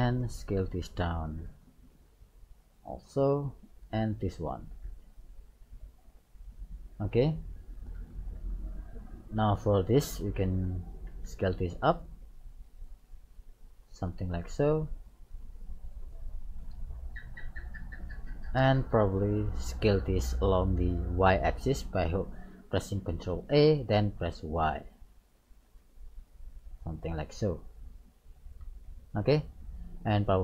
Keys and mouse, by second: 0.9 ctrl+a, 3.8 right click, 5.1 ctrl+a, 7.1 middle click, 9.4 right click, 11.1 ctrl+a, 13.3 click, 14.6-16.6 drag, 20.5-22.3 middle drag, 23.5 ctrl+a, 27.4-29.3 middle drag, 29.3 right click.